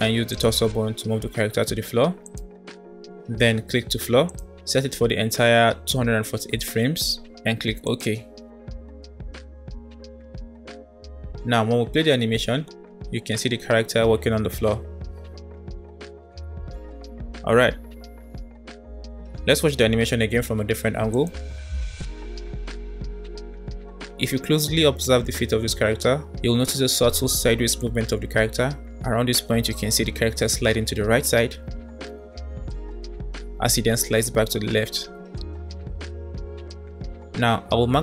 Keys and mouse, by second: 0.0 click, 0.2 g, 4.3-8.6 drag, 10.1 click, 11.6 space, 17.2 space, 17.5-18.2 drag, 17.7 middle click, 19.6-20.0 middle drag, 21.2 middle click, 21.5 space, 26.4-27.2 middle drag, 27.2 space, 27.6 click, 27.9 space, 34.1-35.8 typing.